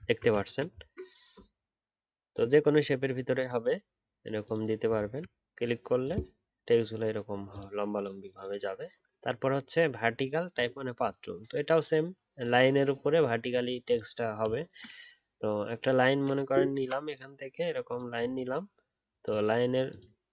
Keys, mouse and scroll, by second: 0.0 alt+scroll down 2, 0.7 scroll down 1, 4.9 alt+scroll up 2.